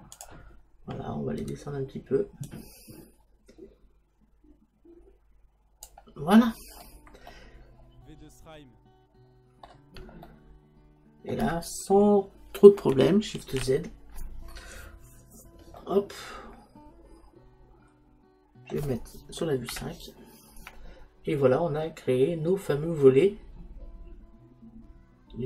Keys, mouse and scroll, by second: 0.3 click, 2.5 click, 6.4-13.7 middle drag, 13.7 shift+z, 15.9-17.9 middle drag, 19.8 KP_5, 22.1-24.8 middle drag.